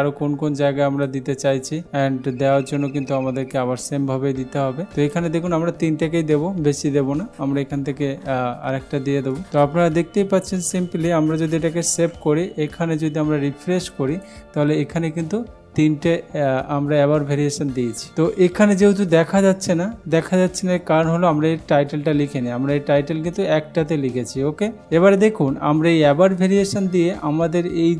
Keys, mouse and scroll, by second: 1.2 click, 1.7 click, 5.1 click, 7.6 ctrl+v, 9.4 click, 11.9 ctrl+s, 14.2 click.